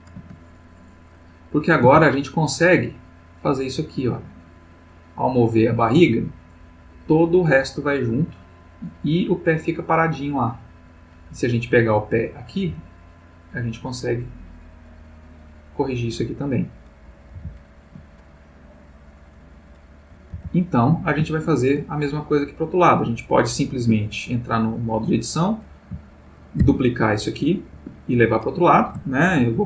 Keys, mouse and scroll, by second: 1.1 click, 1.9 g, 10.9 click, 11.9 click, 12.6 g, 16.6 click, 17.3 alt+g, 18.9 click, 20.3 alt+g, 21.4-21.9 alt+shift+middle drag, 23.8 Tab, 24.5-25.8 drag, 26.6 shift+d, 27.8 Escape, 29.3 ctrl+z.